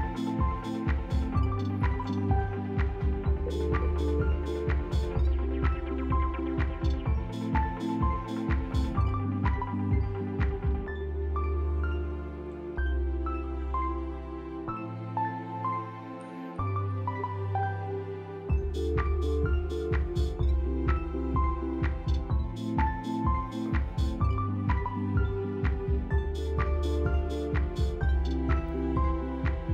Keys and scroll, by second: 0.5 2, 0.5 Return, 6.0 a, 6.6 b, 7.9 t, 8.7 f, 9.9 t, 11.0 Delete, 13.6 q, 15.6 e, 16.6 q, 17.6 F3, 18.3 t, 20.1 q, 20.5 p, 23.4 q, 24.9 p, 26.0 f, 27.4 c, 27.9 a.